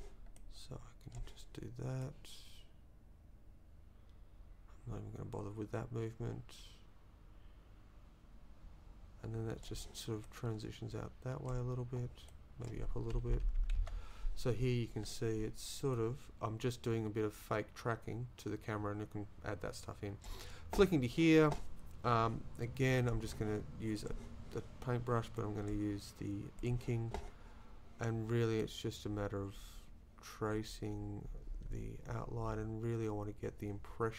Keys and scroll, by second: 13.3 Up, 13.8 Left.